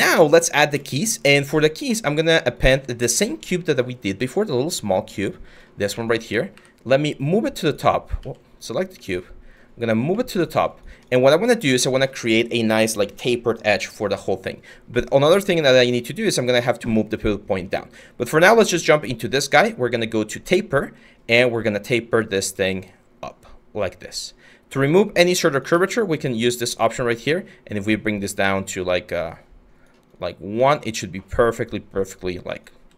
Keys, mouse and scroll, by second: 6.2 w, 7.8 ctrl+z, 25.4 ctrl+z, 32.4 q.